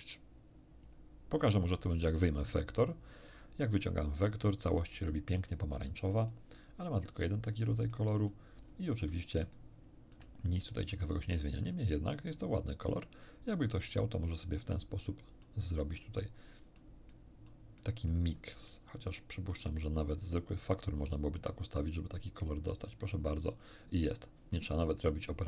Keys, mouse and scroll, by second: 1.8-3.9 drag, 5.5-6.5 middle drag, 6.6-7.7 middle drag, 7.9 middle click, 8.6 scroll up 1, 9.5-10.3 shift+middle drag, 10.7 shift+scroll down 1, 11.5-13.4 middle drag, 13.9 middle click, 14.7 scroll down 1, 15.1 middle click, 15.9-16.9 middle drag, 17.1 middle click, 17.8 middle click, 18.7-19.7 shift+middle drag, 20.8 click, 21.8-23.8 drag.